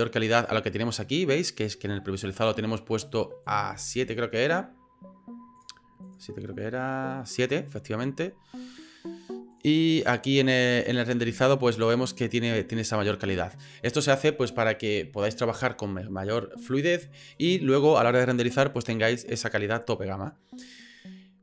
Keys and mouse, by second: 5.5 click, 6.0 click.